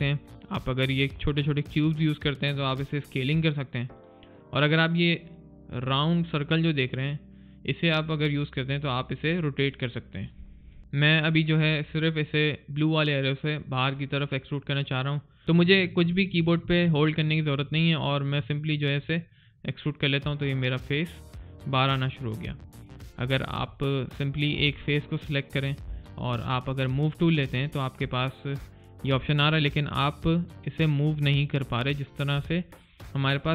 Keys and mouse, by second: 10.8 alt+click, 18.8 alt+click, 23.3 alt+right click, 23.6 alt+click, 28.1 alt+middle click, 28.5 click.